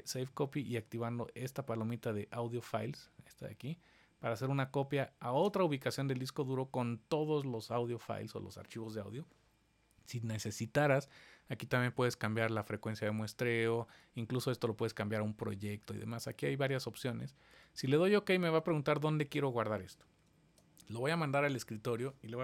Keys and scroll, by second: 20.4 super+d.